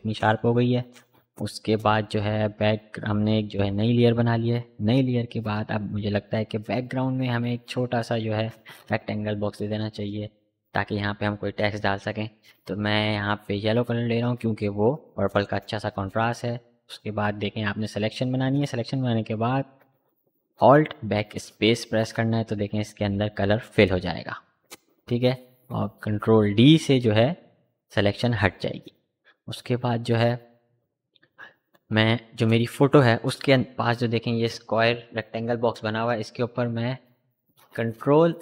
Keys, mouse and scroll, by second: 1.3-10.9 drag, 12.5 click, 12.5-16.9 drag, 18.9 alt+Num_Lock, 19.2-23.9 drag, 24.2 ctrl+d, 25.4 v, 38.3 ctrl+click.